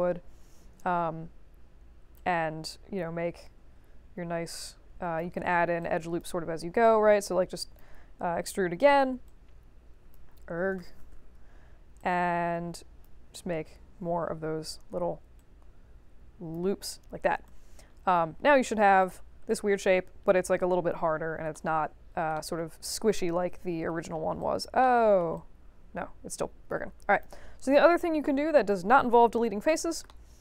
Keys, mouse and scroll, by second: 2.1-5.1 drag, 5.3 middle click, 5.8 alt+click, 6.8 click, 9.2-10.1 drag, 10.8 ctrl+z, 11.9-13.0 drag, 15.3-16.5 drag, 16.6 3, 17.4 right click, 19.0 click, 19.4 alt+click, 21.5 alt+middle click, 22.3 alt+middle click, 23.3 ctrl+1, 23.9 middle click, 24.4 alt+click, 24.8 alt+middle click, 25.3-26.6 drag, 27.1 click, 29.4 middle click, 29.6 middle click, 30.0 alt+middle click.